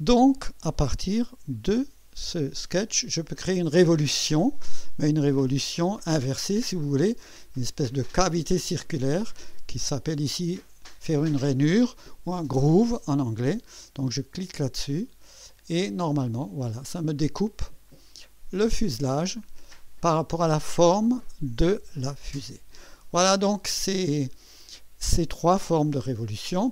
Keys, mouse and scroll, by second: 14.6 click, 16.8-17.5 drag, 18.8 click, 20.5-21.4 drag, 21.7-23.4 typing, 22.4 scroll up 1, 23.0-23.7 right drag, 23.0 click.